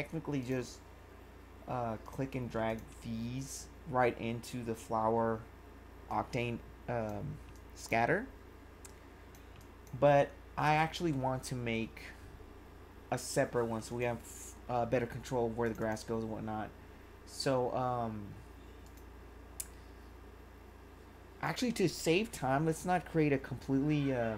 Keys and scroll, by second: 7.5 1, 9.0 1.